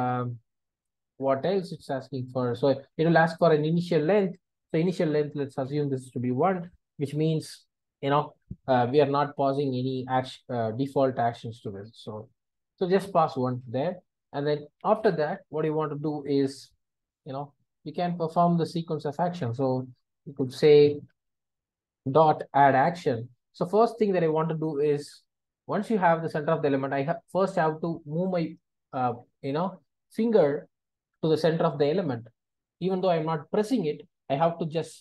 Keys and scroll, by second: 11.6 alt+Return, 22.7 Return.